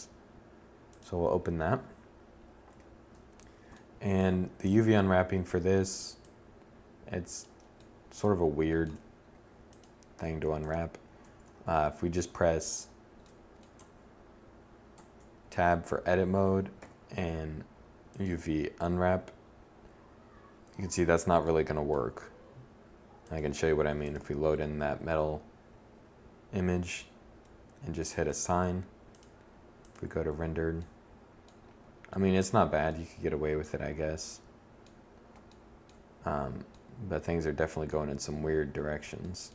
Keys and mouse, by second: 1.6 1, 10.4 Tab, 11.5 a, 12.7 Tab, 13.9 Tab, 15.7 u, 25.7 1, 37.5 1.